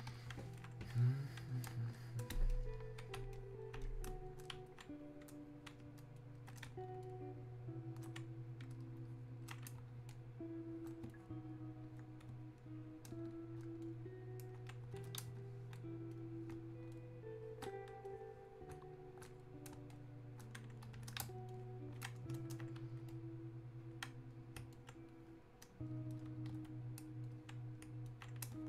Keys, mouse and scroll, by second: 0.6-10.1 drag, 13.9 ctrl+shift+click, 18.1-28.1 shift+drag, 28.1 alt+click.